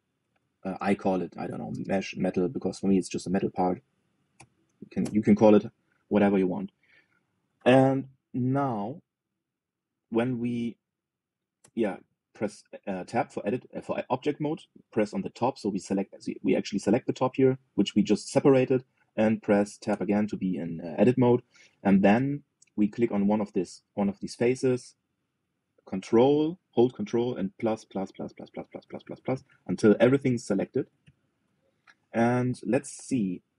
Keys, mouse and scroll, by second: 7.4-7.7 scroll up 1, 7.7-10.2 shift+middle drag, 10.2 click, 11.1 click, 12.3 Tab, 15.5 click, 20.6 Tab, 21.2-23.8 middle drag, 23.8 click, 28.3 ctrl+KP_Add, 28.5 ctrl+KP_Add, 28.7 ctrl+KP_Add, 28.9 ctrl+KP_Add, 29.1 ctrl+KP_Add, 29.2-30.0 ctrl+KP_Add, 30.5 KP_Add, 30.7 KP_Add, 30.8 KP_Add, 31.0 KP_Add, 31.1 KP_Add, 31.3 KP_Add, 31.4 KP_Add, 31.6 KP_Add, 31.7 KP_Add, 32.8-33.5 middle drag.